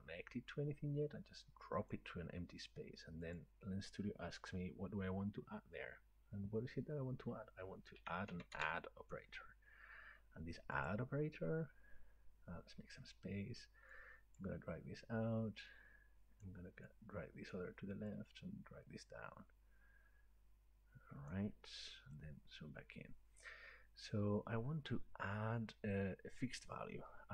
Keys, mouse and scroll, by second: 1.9 click, 3.4 click, 8.0-9.0 typing, 11.0 click, 12.8-13.9 scroll, 14.3 scroll, 14.4 click, 16.4 click, 21.3 click, 21.7-22.7 scroll, 22.7-23.5 scroll, 27.1-27.3 middle drag.